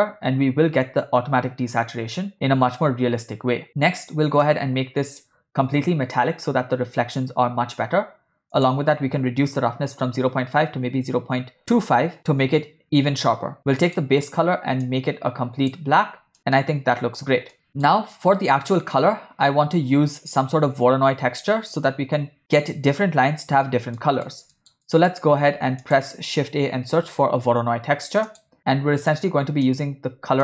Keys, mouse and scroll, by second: 3.8 middle click, 4.4-5.7 drag, 8.6-12.4 drag, 13.9 click, 16.5 ctrl+middle click, 17.6 space, 17.7 middle click, 24.1 middle click, 24.6 ctrl+middle click, 24.9 middle click, 25.4 shift+a, 29.8 click.